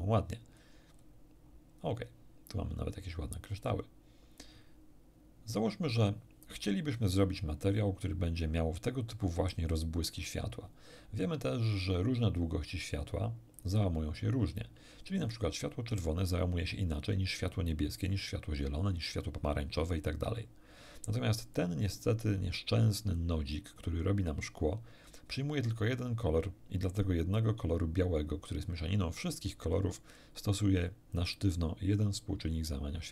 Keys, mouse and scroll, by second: 0.4-0.8 scroll down 1, 0.9-1.6 scroll down 2, 2.2 scroll down 1, 13.6 click, 21.6 click.